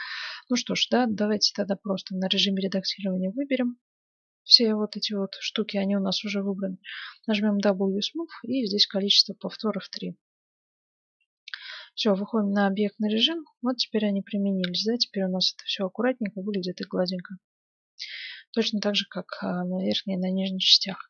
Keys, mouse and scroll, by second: 6.3 w, 10.9 Tab, 11.8-12.3 scroll down 1, 12.3-17.4 middle drag, 19.4-20.9 middle drag, 20.9 KP_7.